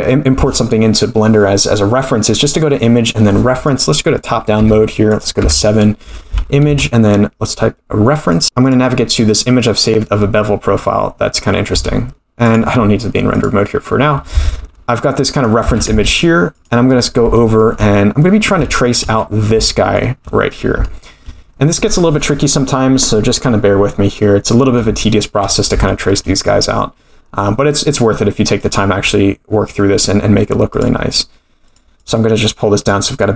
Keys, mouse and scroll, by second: 5.4 KP_7, 6.6 shift+a, 11.7 s, 13.4 click, 14.3 g, 15.6 g, 16.9 scroll up 4, 17.3 shift+middle click, 18.0-18.3 scroll up 1, 18.3 scroll down 2, 18.7 shift+middle drag, 19.2-19.5 scroll up 1, 19.6-20.0 shift+middle drag, 20.8 shift+middle click, 25.0 shift+middle click, 25.4 scroll down 1, 25.8 shift+middle click, 28.6-29.7 drag, 30.9 click, 32.9 click.